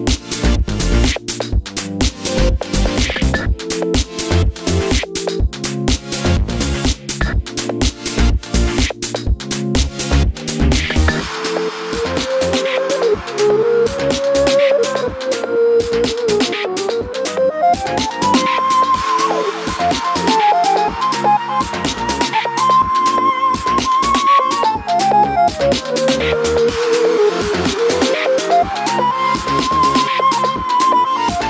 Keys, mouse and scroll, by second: 0.3 click, 0.4 middle click, 1.2 click, 1.3 Tab, 1.5 click, 1.7 shift+click, 1.8-2.1 scroll up 1, 2.1 i, 4.5 middle click, 5.1 click, 5.2 y, 5.9 middle click, 6.1 i, 6.8 click, 8.7 click, 8.8-10.3 middle drag, 9.8 g, 10.3 click, 11.2 middle click, 11.3 scroll down 1, 11.4 Tab, 11.7 click, 11.8 middle click, 12.4 click, 12.7 Tab, 12.9 click, 13.4 middle click, 13.6 scroll up 1, 13.7 i, 14.0 click, 14.7 e, 14.9-15.2 middle drag, 15.2 click, 15.3 middle click, 16.2 click, 16.4-20.7 middle drag, 17.7 ctrl+s, 19.1 scroll up 2, 19.4 click, 19.6 Tab, 19.8 a, 20.8 click, 20.8-22.4 middle drag, 21.1 2, 22.3 Tab, 22.4 shift+click, 23.0 KP_3, 23.3-25.8 shift+middle drag, 23.4 Tab, 25.5 1, 25.8 click, 26.0 g, 26.5 Escape, 26.7 z, 27.0 click, 27.0 g, 28.0-29.0 drag, 28.0 g, 29.7-31.3 drag, 29.9 g.